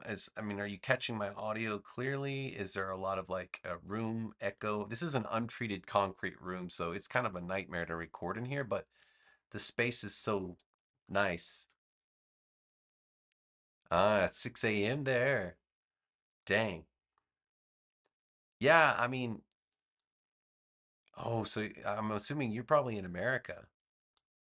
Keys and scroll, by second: 10.9 space.